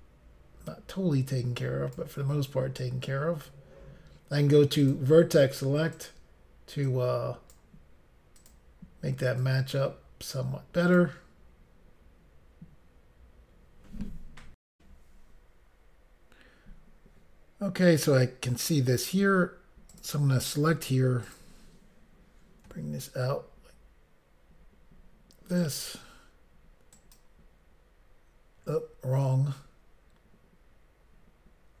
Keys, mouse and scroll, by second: 4.9 click, 6.0 click, 6.9 click, 8.5 click, 8.6 click, 9.8 click, 11.1 click, 14.7 Insert, 15.7 Pause, 18.1 click, 18.2 click, 19.9 click, 20.0 click, 21.2 click, 21.3 click, 25.6 ctrl+right click, 26.9 ctrl+right click.